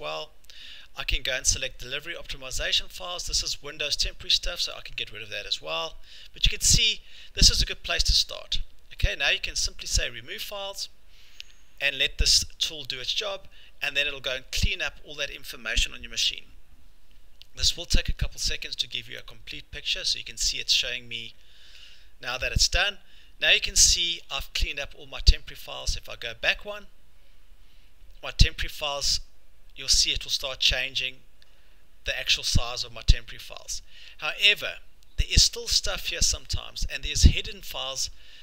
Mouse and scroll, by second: 1.1 middle click, 1.2 middle click, 4.5 scroll, 4.8 click, 5.7-6.1 scroll, 8.9-9.8 scroll, 10.0 click, 23.4-23.8 scroll, 24.2 scroll, 25.9 click, 34.7-38.4 scroll.